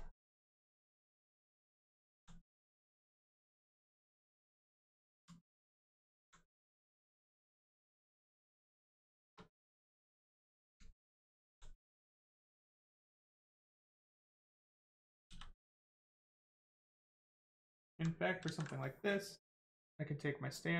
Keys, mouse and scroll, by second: 1.0 right click, 1.0 right click, 2.0 alt+right click, 3.0 right click, 3.0 right click, 4.8 alt+right click, 5.4 right click, 5.5 right click, 6.0 alt+right click, 6.8 right click, 8.1 alt+click, 8.7 right click, 9.2 shift+right click, 9.4 alt+right click, 11.8 right click, 12.8 click, 14.2 right click, 15.3 click, 15.7 click, 15.8 click, 17.4 alt+right click, 18.4 ctrl+right click, 18.4 ctrl+z.